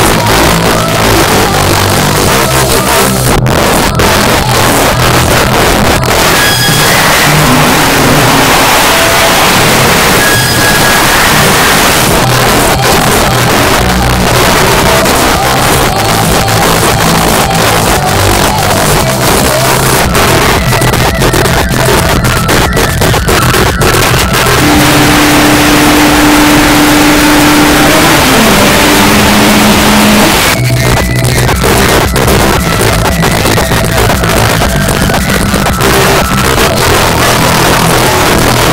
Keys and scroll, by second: 11.9 Page_Down, 30.3 Page_Down.